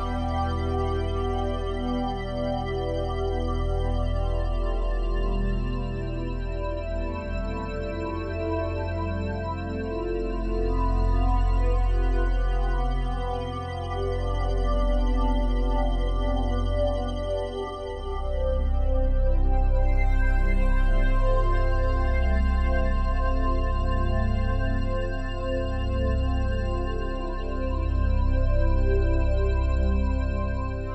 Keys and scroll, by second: 19.8 ctrl+alt+shift+e.